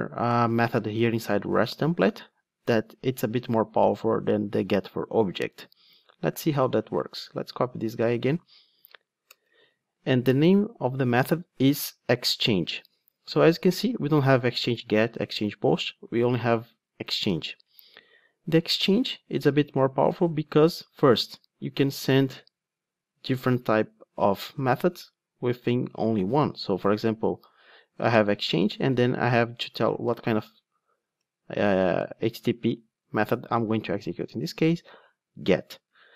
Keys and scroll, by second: 7.6 super+c, 31.2 Return, 32.6 super+1.